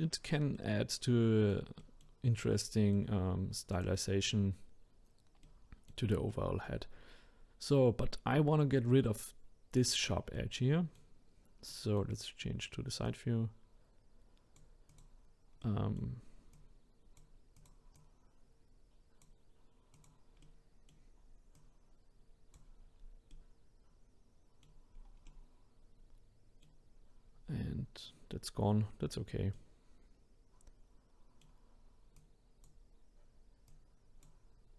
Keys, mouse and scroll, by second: 2.3-2.7 scroll up 1, 2.7-3.7 middle drag, 3.7 click, 5.4-9.3 middle drag, 10.3-13.0 middle drag, 13.0 click, 14.9 click, 15.6 middle click, 16.5 click, 17.6-20.0 drag, 20.4-21.5 middle drag, 21.5 click, 23.0-23.3 scroll down 2, 23.3-24.9 middle drag, 24.9-25.3 scroll down 1, 25.3-27.2 middle drag, 27.2-29.5 scroll up 2, 29.5-32.1 middle drag, 32.1 click, 33.7 click.